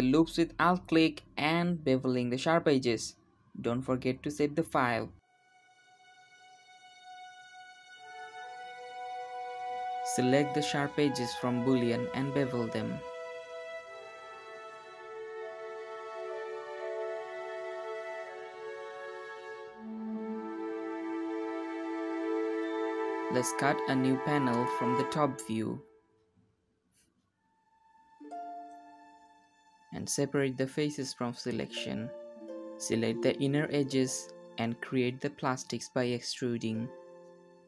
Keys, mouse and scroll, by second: 0.0 Tab, 0.3 alt+click, 0.7 ctrl+b, 1.6 middle click, 2.3 Tab, 5.1 alt+shift+click, 5.7 middle click, 6.3 ctrl+click, 7.1 ctrl+click, 8.0 middle click, 8.2 alt+shift+click, 9.0-10.3 ctrl+drag, 10.6-12.6 ctrl+drag, 12.8 middle click, 13.3 ctrl+click, 13.8 middle click, 14.3 ctrl+click, 14.9 ctrl+b, 17.6 Tab, 17.8 shift+middle click, 18.5 KP_7, 19.6 Tab, 20.3 k, 24.1-24.6 scroll up 3, 29.8 3, 29.8 click, 30.2 shift+click, 31.1 p, 32.0 click, 32.8-35.4 shift+drag, 35.7 shift+click, 36.0 e, 37.3 click.